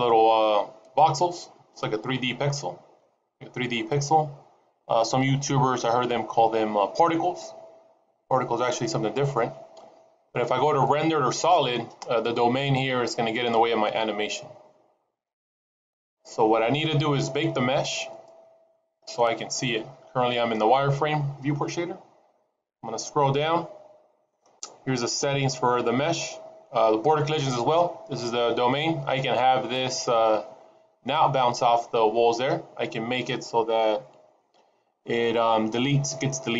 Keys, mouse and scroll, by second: 12.9 click, 13.9 middle click, 16.1 click, 16.7 middle click, 18.1 click, 18.8 middle click, 22.1-23.1 scroll down 3, 23.1-24.2 scroll down 2, 36.4-36.5 scroll down 2.